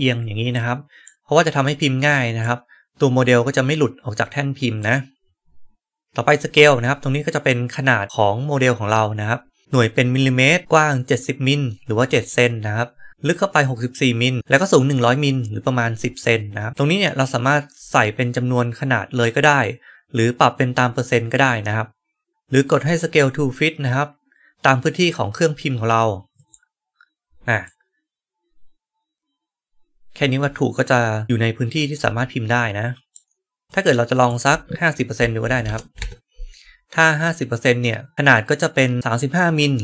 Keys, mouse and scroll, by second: 1.2-2.4 right drag, 4.7-6.0 right drag, 26.2 click, 27.5-33.0 right drag, 33.6 right click, 34.2 click.